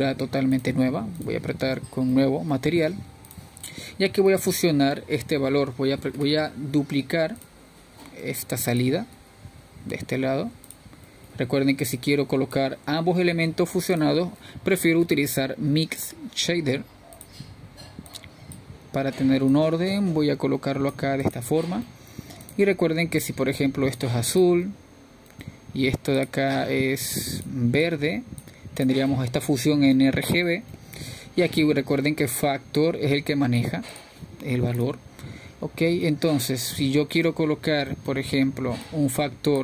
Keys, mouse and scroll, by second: 0.3-2.1 drag, 3.9-12.4 drag, 12.4 shift+d, 15.3 click, 22.8 drag, 24.6 click, 26.5 click, 31.1 click, 32.4-34.9 middle drag, 34.9-39.6 drag.